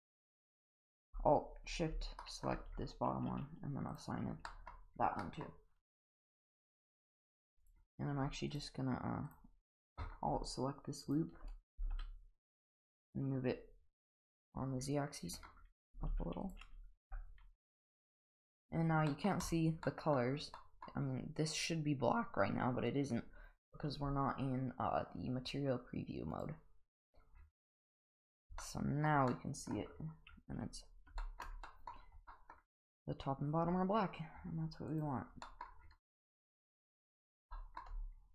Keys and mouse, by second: 0.6 alt+shift+click, 2.2 shift+middle click, 3.9 click, 4.5 middle click, 5.2 middle drag, 7.6 click, 11.7 g, 15.9 g, 17.0 Tab, 19.1 middle drag, 19.9 middle drag, 20.6 middle drag, 28.6-29.0 middle drag, 29.3-29.7 middle drag, 31.2 shift+middle drag, 31.7 middle drag, 32.3 middle drag, 34.9 click, 35.4 middle drag, 37.5 shift+middle drag.